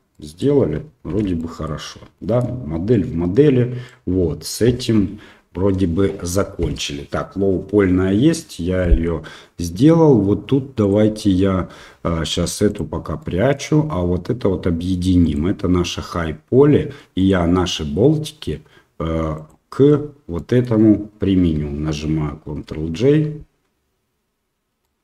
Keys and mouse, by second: 0.1 middle drag, 1.1 shift+z, 1.4 middle drag, 2.1 shift+middle drag, 2.9-3.8 middle drag, 8.8 middle click, 10.8 click, 12.7 click, 13.2 middle click, 15.2 click, 17.2 click, 19.3 ctrl+click, 20.3 middle click, 24.8 ctrl+j, 24.9-25.0 middle drag.